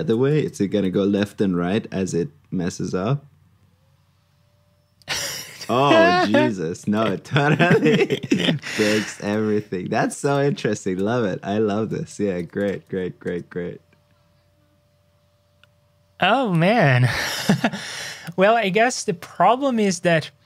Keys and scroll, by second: 0.8 super+c, 1.5 super+v, 12.3 super+c, 12.8 super+v.